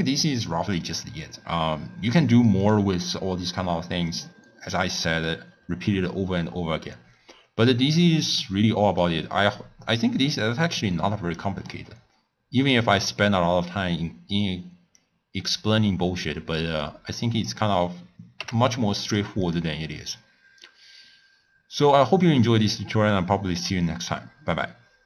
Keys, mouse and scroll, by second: 2.2 click, 2.5 click, 3.0 click, 4.1 click, 4.7-5.2 middle drag, 5.2 scroll down 2, 5.3-5.8 scroll up 3, 5.8-7.0 scroll down 10, 7.0 scroll up 1, 7.0-7.5 scroll down 3, 7.5-7.9 scroll up 1, 7.9-9.3 middle drag, 9.3-10.8 scroll up 2, 10.8 click, 11.5-12.0 scroll down 1, 12.0 scroll up 5, 12.3 scroll down 1, 12.5-13.6 middle drag, 13.6-15.0 scroll down 1, 15.0 click, 17.3 click, 18.3 g, 19.4 click.